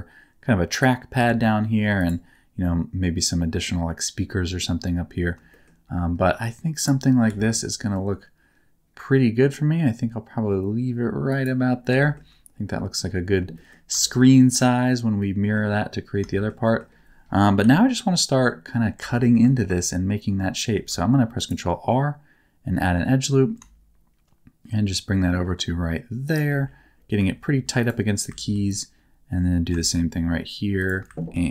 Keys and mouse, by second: 0.7 click, 0.7 right click, 1.1 g, 1.9-4.2 drag, 1.9-4.2 right drag, 5.5 shift+middle click, 6.7 click, 6.7 right click, 7.2 g, 11.2 click, 11.9 shift+middle click, 13.5 shift+middle click, 14.0 shift+middle click, 15.2 middle click, 16.3 shift+middle click, 16.6 middle click, 17.6 KP_7, 19.1 middle click, 20.7 ctrl+r, 26.2 shift+click, 27.3 ctrl+r, 28.3 ctrl+r, 30.7 shift+click, 31.2 ctrl+r.